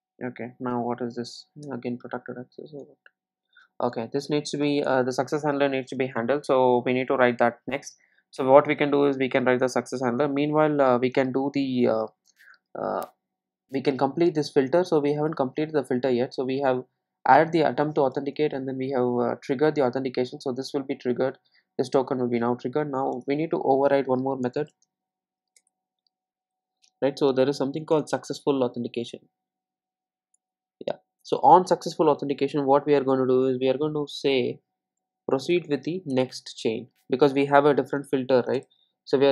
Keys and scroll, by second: 1.7 super+b, 24.6 super+n.